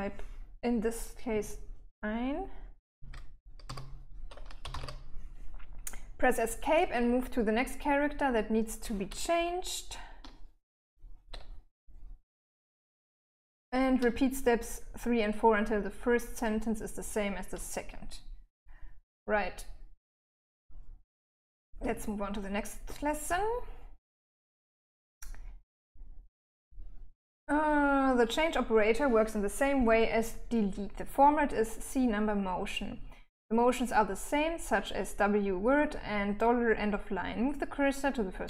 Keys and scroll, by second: 2.3-4.8 typing, 6.3 Escape, 9.6-10.5 l, 10.9 l, 21.2-22.2 j, 22.4 j, 22.7-23.7 j, 24.0 j, 25.8 j.